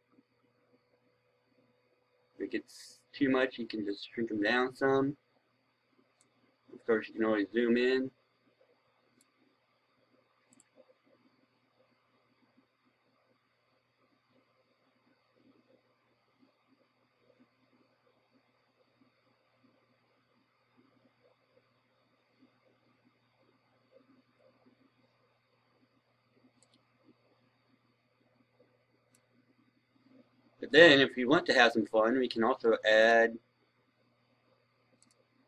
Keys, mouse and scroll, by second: 1.0-4.2 scroll down 1, 4.7-5.4 scroll up 1, 6.0-9.2 drag, 22.8-23.7 scroll down 1, 23.7-24.2 scroll up 1, 26.5-29.2 drag.